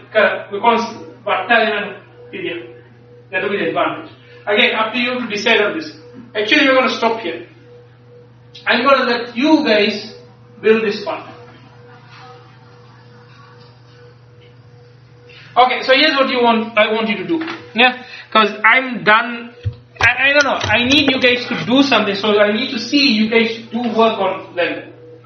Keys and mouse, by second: 18.4-25.2 middle drag.